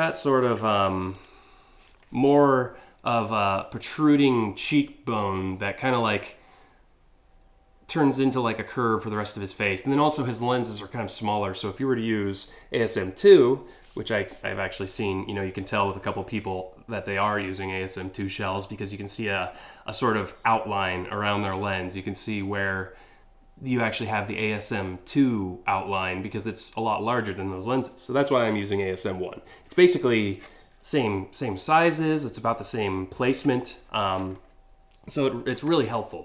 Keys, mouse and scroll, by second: 0.7 click.